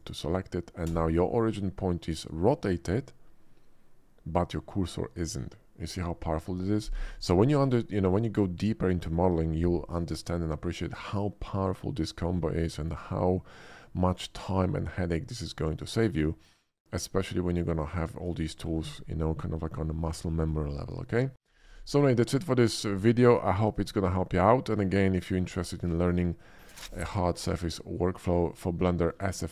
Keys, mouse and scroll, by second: 0.0 alt+click, 10.4-11.0 middle drag, 12.7 shift+middle click, 13.1-13.6 shift+middle drag, 14.0 shift+middle drag, 14.3-14.6 shift+middle drag, 16.3-17.0 shift+middle drag, 17.2-17.6 shift+middle drag, 17.9 shift+middle drag, 18.4 shift+middle click, 24.3-24.9 middle drag, 25.2 shift+middle drag, 25.6-26.1 shift+middle drag, 26.5 shift+middle click, 27.0-29.5 typing, 27.5 click, 28.1 ctrl+b, 28.9 click, 29.0 ctrl+z.